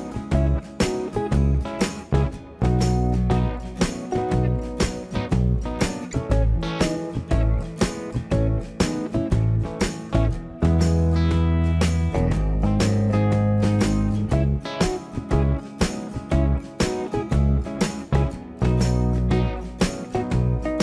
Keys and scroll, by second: 5.5 shift+Delete, 7.4 Delete, 7.6 Delete, 8.1 Delete, 11.9 Delete, 13.7 Delete, 14.6 Delete, 19.2 Delete.